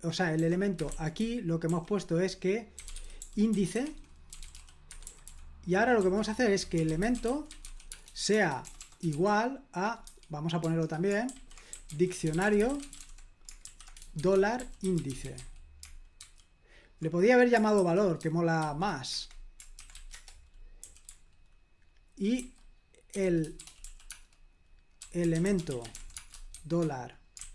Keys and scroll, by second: 0.4-16.2 typing, 17.7-18.6 typing, 19.1 Escape, 19.7-27.5 typing.